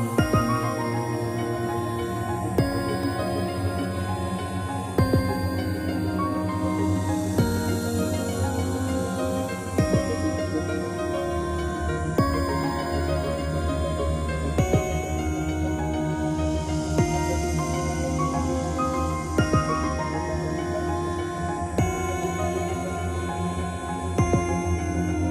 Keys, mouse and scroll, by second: 1.0 click, 1.6 middle click, 3.0 shift+middle click, 3.3 middle click, 4.0 middle click, 5.0 1, 5.9 scroll up 3, 6.4 shift+middle click, 6.6 middle click, 7.1 r, 7.9 Escape, 8.4 g, 9.2 click, 9.9 3, 10.5 g, 10.8 click, 11.7 click, 12.6 7, 13.4 g, 14.3 Escape, 15.1 r, 15.9 click, 15.9 click, 16.2 middle click, 17.2 shift+middle click, 17.5 middle click, 17.6 middle click, 18.0 g, 19.6 click, 19.7 click, 20.1 middle click, 20.4 typing, 21.6-22.4 typing, 21.9 click, 22.8 Escape, 23.5 middle click, 25.0 click.